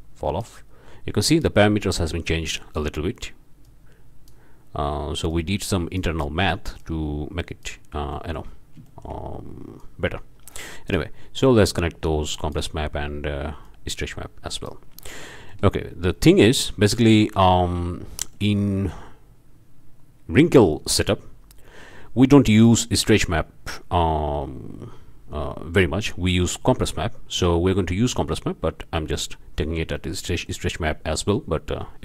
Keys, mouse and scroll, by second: 3.6-4.5 drag, 5.3-6.2 drag, 6.8-7.8 drag, 8.1 shift+click, 9.0 shift+drag, 9.8-11.1 drag, 11.7-12.7 drag, 13.6-14.9 drag, 15.2-15.7 shift+drag, 15.8 shift+middle click, 16.5 click, 16.9-17.4 shift+drag, 17.5 shift+drag, 17.7-18.0 shift+drag, 18.1-18.5 shift+drag, 19.5 click, 30.0 shift+click.